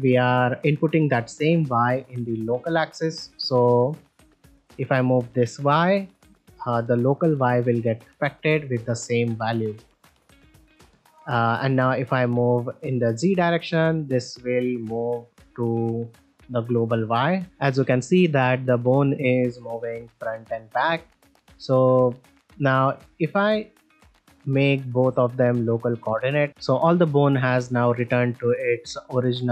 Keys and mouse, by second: 1.3 click, 3.1 middle click, 4.4 click, 11.4 middle click, 13.5-13.9 middle drag, 15.8-16.2 middle drag, 18.3 click, 21.3 click, 23.2-24.8 drag, 26.0 middle drag, 26.5 alt+g, 26.5 alt+r, 28.1-28.4 ctrl+middle drag, 29.0 shift+middle drag, 29.4 ctrl+middle drag.